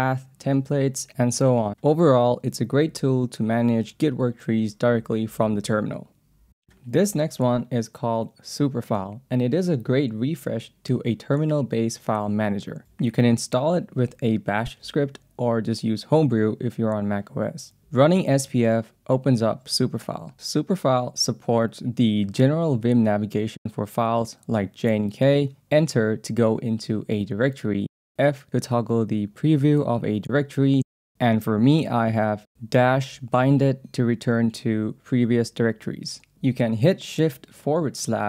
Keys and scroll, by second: 18.5 Return, 20.8 j, 21.2 k, 22.3-24.2 typing, 25.6 Return, 26.4 f, 29.3 j, 30.1 f, 32.8 -, 34.8-37.8 typing, 35.5 Return.